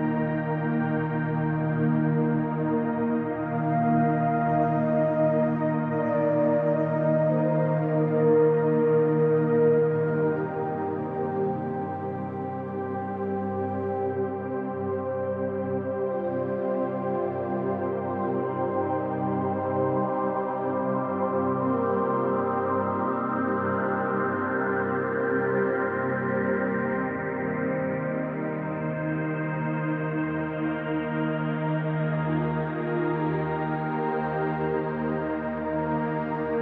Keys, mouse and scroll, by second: 0.3 scroll down 1, 1.9 scroll down 1, 2.9 scroll up 1, 4.5-4.9 scroll up 1, 4.9 Tab, 7.2-8.1 scroll up 2, 8.1 click, 8.4 middle click, 8.9 shift+click, 9.3 middle click, 9.6-12.5 drag, 12.6 scroll down 1, 12.8-20.3 middle drag, 13.5 scroll down 1, 14.2 Tab, 14.5 scroll down 1, 15.7 Tab, 16.9 ctrl+z, 18.6 scroll up 1, 20.3 click, 21.3-23.6 middle drag, 21.9 scroll down 2, 23.2 e, 24.0 click, 26.3 scroll down 1, 26.5 middle click, 27.4 click, 29.3 scroll down 1, 29.7 scroll up 1, 30.1-36.6 middle drag, 31.5 ctrl+z, 33.2-33.7 scroll up 2, 33.7 z, 34.8 scroll up 2.